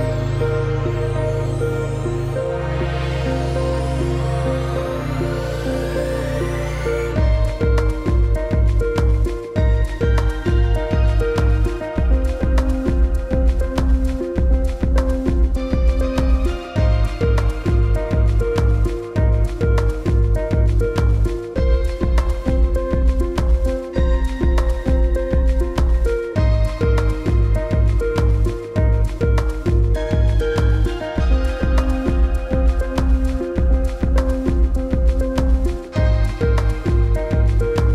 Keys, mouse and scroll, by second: 6.4 click, 7.7 click, 15.0-16.5 typing, 17.4 F9, 18.8 click, 25.6 click, 29.8 ctrl+v, 31.6 click, 33.5 click.